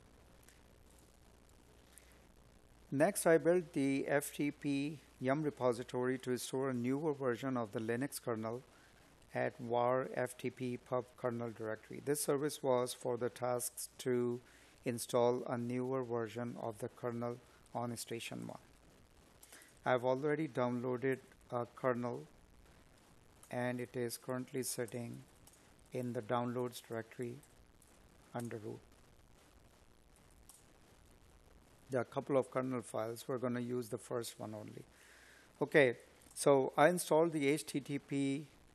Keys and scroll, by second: 20.0 space, 23.1 space, 24.8 space, 26.4 Tab.